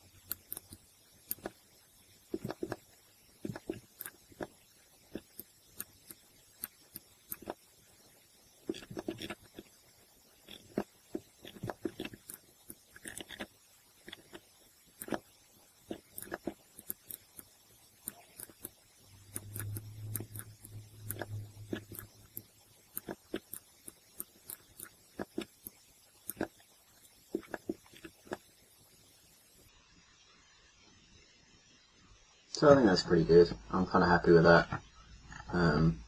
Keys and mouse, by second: 0.7 middle click, 8.5 middle click, 10.6 middle click, 12.6 middle click, 15.1 middle click, 15.3 middle click, 16.2 click, 16.4-17.9 middle drag, 18.6 middle click, 19.7-21.2 middle drag, 22.3 middle click, 23.8 middle click, 29.2-30.6 middle drag, 32.9 middle click.